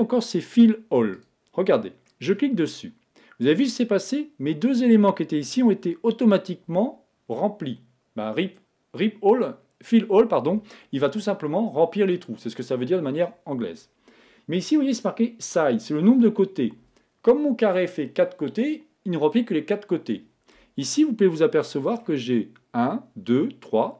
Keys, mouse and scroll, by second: 2.1-3.8 middle drag, 21.1-22.8 middle drag.